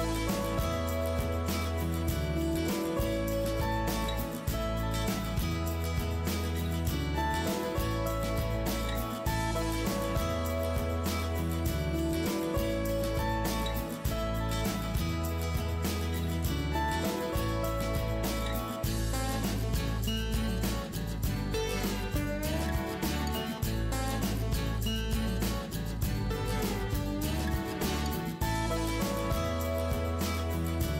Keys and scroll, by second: 0.1 ctrl+alt+=, 3.0-3.9 typing, 5.0 typing, 9.1 s, 10.9 Up, 12.5-13.4 typing, 14.1 ctrl+-, 15.5 Down, 15.5 Down, 16.0 Down, 23.2 ctrl+z, 29.3 Delete.